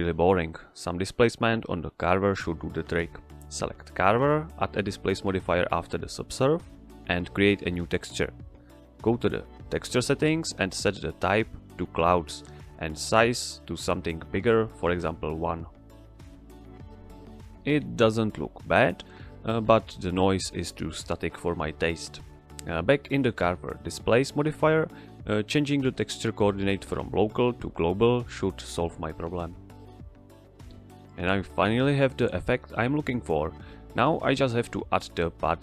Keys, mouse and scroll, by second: 1.9 click, 13.9 Return, 21.1 click, 24.4 click, 31.0 click.